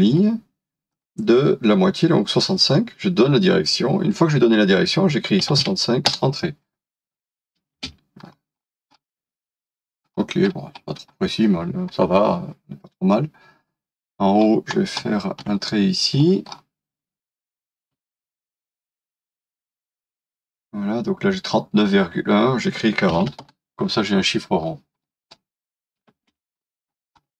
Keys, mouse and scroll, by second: 0.1-1.3 scroll up 1, 1.3 typing, 5.3-6.1 typing, 6.1 Return, 7.7 space, 8.2 scroll up 1, 10.2 scroll down 1, 13.7 scroll up 1, 14.4-14.7 scroll down 1, 15.0 middle click, 15.6 scroll up 1, 17.8 l, 22.9-23.7 typing, 25.0 scroll down 1, 26.4 space, 26.6-27.1 scroll down 1, 27.2 shift+middle click, 27.2 shift+scroll down 1.